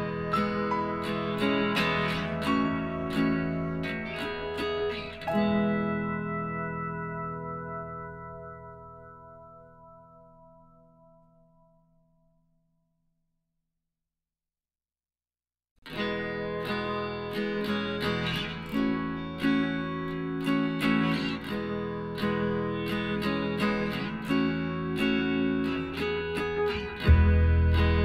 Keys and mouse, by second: 1.2 middle click, 1.7-3.0 right drag, 3.0 middle click, 3.0 KP_1, 4.0 Tab, 6.4-8.2 drag, 6.7 z, 7.2-9.8 right drag, 8.0 b, 9.8-11.5 drag, 11.0-14.5 right drag, 11.3 b, 12.4 click, 15.1-17.4 middle drag, 16.5 z, 17.2 Tab, 18.2 a, 19.7-21.3 right drag, 20.5 m, 23.6-25.4 drag, 24.2-25.3 right drag, 25.1 a, 25.4 middle click, 26.9-28.0 right drag, 27.2 Tab.